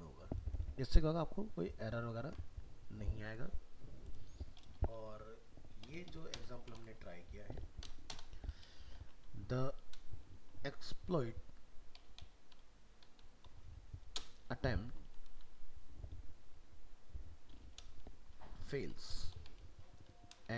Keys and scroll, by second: 6.8 ctrl+s.